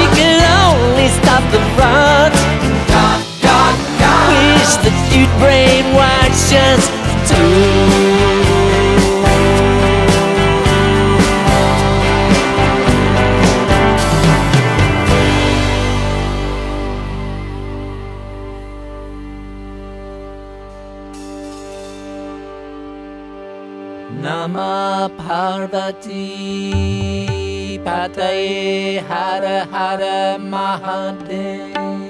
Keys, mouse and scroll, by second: 0.5 click, 3.3-4.6 drag, 5.5-6.1 drag, 9.5 click, 10.8 click, 11.8 click, 12.9 click, 14.4 click, 15.4 click, 17.1 click, 17.9 click, 18.8 click, 19.9 click, 21.3 click, 22.3 click, 24.2 click, 25.7 click, 27.1 click, 28.0 click, 28.7 click, 29.7 click, 31.1 click, 31.8 click.